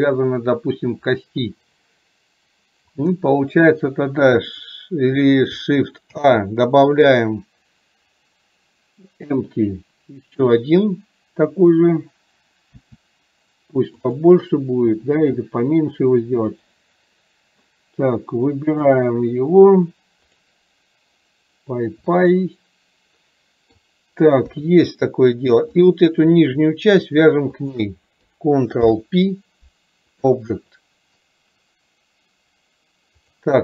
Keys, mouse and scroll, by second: 18.8 click, 22.3-23.8 middle drag, 25.8 click, 27.6 shift+click, 30.9 middle click.